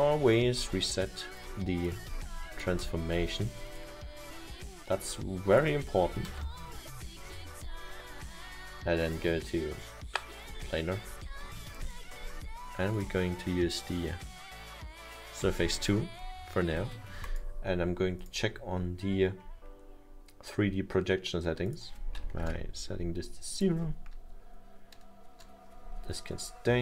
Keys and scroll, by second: 2.3 0, 2.8 0, 6.1 1, 8.4 Return, 22.4 0, 22.5 Return.